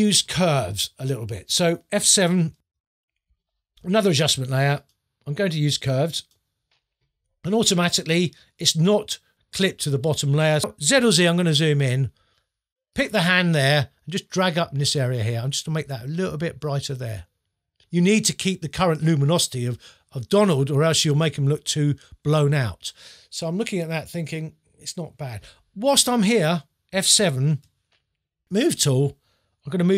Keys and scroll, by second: 2.6 F7, 11.0 z, 27.6 F7.